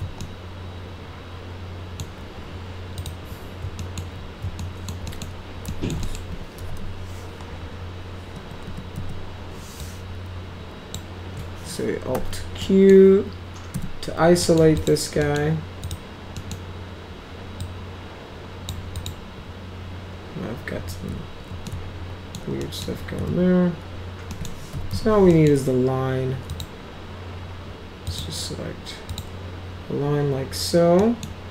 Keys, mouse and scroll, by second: 0.2-2.0 alt+middle drag, 3.0 click, 3.8 alt+middle click, 4.6 alt+middle click, 5.1 middle click, 5.7 alt+middle click, 6.0 middle click, 6.3-7.3 typing, 8.4 F2, 8.7 F2, 9.8-10.9 drag, 12.2 alt+q, 12.6 middle click, 13.8 F3, 14.4 middle drag, 14.8 click, 15.2 middle drag, 15.8 click, 16.4 middle click, 17.6-18.7 drag, 19.0 click, 21.7 alt+middle click, 22.6 alt+middle click, 23.2 z, 24.3 middle click, 24.5-25.4 typing, 25.3 middle drag, 26.5 click, 28.1 click, 29.1 click, 31.0 right click.